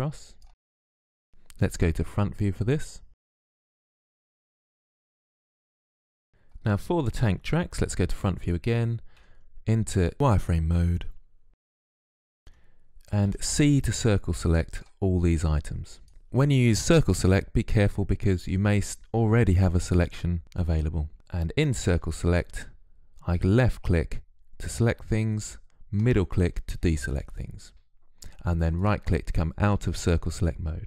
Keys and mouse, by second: 1.9 KP_1, 3.2 click, 3.7 click, 6.0 middle click, 7.7 KP_1, 9.0 z, 13.1 c, 16.1 ctrl+z, 16.7 ctrl+z, 21.8 c, 28.7-30.8 drag.